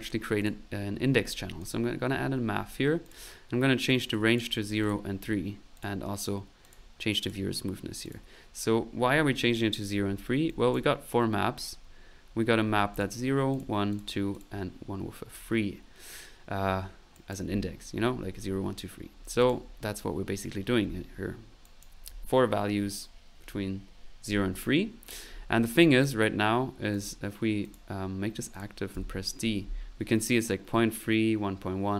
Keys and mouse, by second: 0.4 click, 0.8 click, 1.6 click, 2.1 middle click, 3.0 click, 4.1 click, 5.7 click, 6.6 click, 7.2 click, 8.0 click, 10.1 middle click, 10.5 click, 12.8 middle click, 12.9 click, 13.5 click, 13.9 click, 14.3 click, 17.1 middle click, 17.1 click, 19.1 middle click, 19.4 click, 19.7 click, 21.6 click, 25.8 click, 26.9 click, 27.6 click, 28.5 click, 28.9 d.